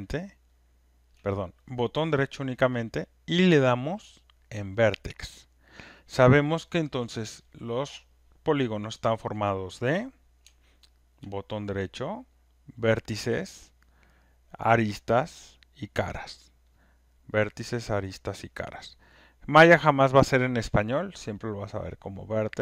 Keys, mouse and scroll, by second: 1.1 shift+right click, 4.8 right click, 5.8 shift+right click.